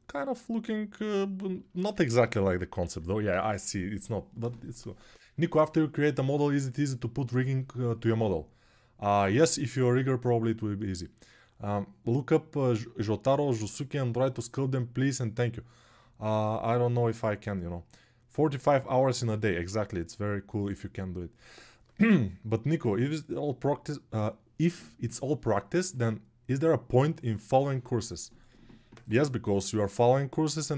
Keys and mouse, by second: 2.6 alt+q.